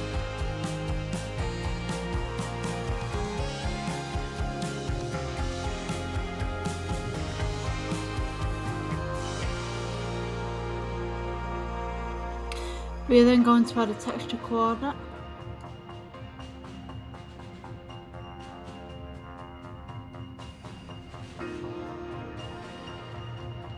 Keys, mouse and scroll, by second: 0.4-13.2 drag, 16.0-18.0 drag.